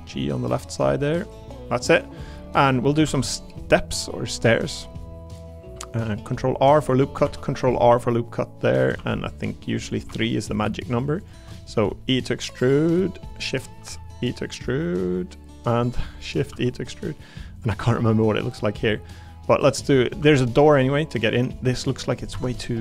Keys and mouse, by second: 1.2 click, 1.8 middle click, 2.2 middle click, 2.7 middle click, 3.0 ctrl+r, 6.9 click, 7.2 ctrl+r, 9.0 ctrl+r, 9.9 click, 10.0 3, 11.7 e, 12.8 click, 13.8 e, 17.5 click, 17.8 middle click, 18.3 middle click, 19.2 middle click, 20.2 ctrl+r, 22.3 Escape, 22.6 middle click.